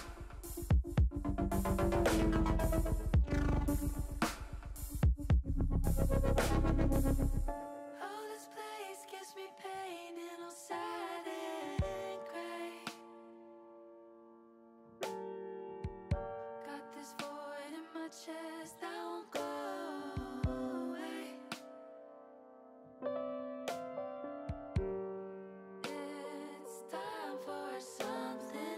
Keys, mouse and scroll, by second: 1.3 click, 6.2 middle click, 7.5-10.4 middle drag, 10.5 middle click, 11.8 ctrl+z, 13.7 click, 14.5 Tab, 14.9-16.0 middle drag, 18.0 middle click, 20.4 click, 20.9 middle click, 22.5 shift+middle click, 25.1 shift+click, 25.9 shift+click, 26.3 middle click, 27.4-28.5 drag.